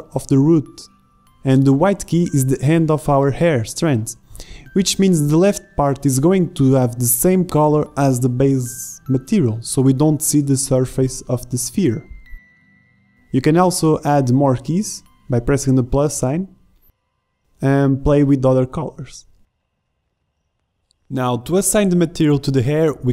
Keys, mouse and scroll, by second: 2.7-4.6 drag, 7.3-10.1 drag, 11.6 z, 12.0-18.5 drag.